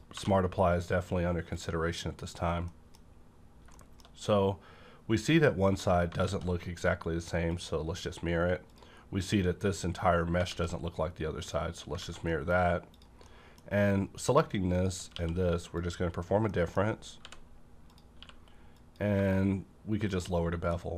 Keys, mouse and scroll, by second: 0.1 2, 1.5 click, 2.3 scroll down 1, 2.6 middle click, 2.7 middle click, 3.3-5.8 scroll up 2, 3.7 shift+middle click, 6.2 alt+x, 7.5 click, 8.6 click, 9.3 scroll down 1, 10.4 alt+x, 11.4 click, 12.0 a, 12.0 click, 12.2 middle click, 12.6 scroll up 1, 12.8 click, 13.2-15.1 middle drag, 14.7 click, 15.1 q, 15.8 click, 16.8 middle click, 16.8 scroll up 1, 17.1 h, 17.4 scroll up 1, 17.8 click, 18.1 q, 18.8 click, 20.1 shift+click, 20.3-20.7 shift+scroll down 2, 20.6 middle click.